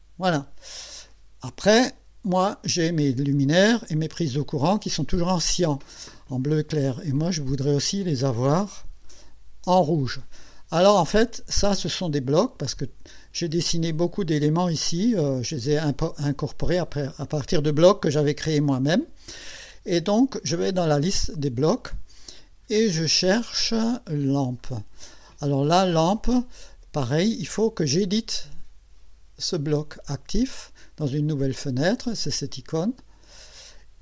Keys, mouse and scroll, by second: 1.7-2.3 scroll up 2, 20.9 click, 21.7-22.9 scroll down 5, 24.6 click, 32.5 click.